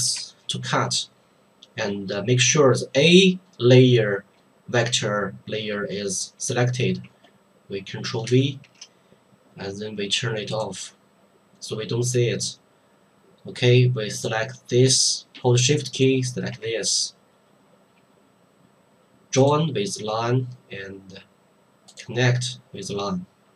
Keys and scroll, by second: 8.2 ctrl+v.